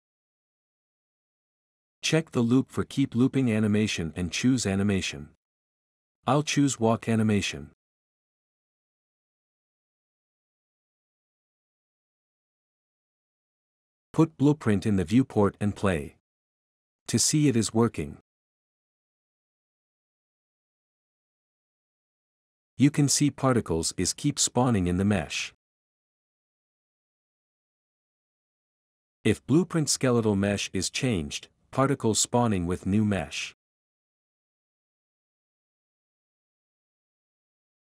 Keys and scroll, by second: 0.1 Return, 20.5-23.8 typing, 24.9 Escape, 26.6 typing, 27.7 typing, 35.9 typing, 37.7-37.8 typing.